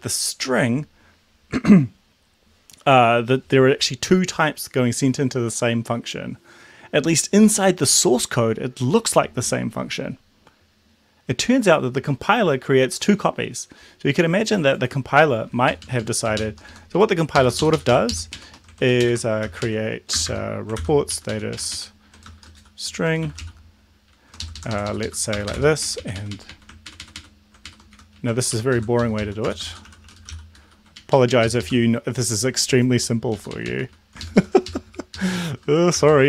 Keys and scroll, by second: 15.7 Down, 15.9 Down, 16.1 Down, 16.4 shift+Up, 16.7 Left, 17.0 Right, 17.4 Left, 17.7 shift+Up, 18.1 shift+Left, 18.3 shift+Right, 19.0 shift+Right, 19.4 ctrl+c, 19.6 Right, 20.1 Return, 20.3 Return, 20.8 ctrl+v, 21.1 Up, 21.3 Up, 21.5 Right, 22.2-23.9 typing, 24.5 ctrl+shift+Left, 25.1 Left, 25.4 BackSpace, 25.6 shift+s, 25.9 Right, 26.0 Right, 26.2 Right, 26.4 Right, 26.5 Right, 27.7 shift+Right, 28.0 Delete, 28.5 ctrl+End, 28.7 Left, 29.1 Left, 29.2 Left, 29.4-30.8 typing, 31.1 Up, 31.2 Up, 31.3 Up, 31.5 Left, 33.4 Right, 33.6 Right, 33.8 Right, 34.3 ctrl+shift+Left, 36.1-36.2 typing.